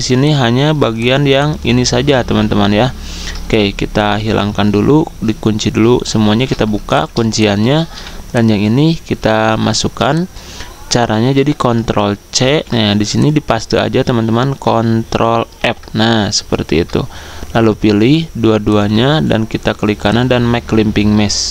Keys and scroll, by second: 0.0-1.4 typing, 2.2 ctrl+z, 6.2 ctrl+alt+2, 9.3 ctrl+z, 12.4 ctrl+c, 15.6 ctrl+f.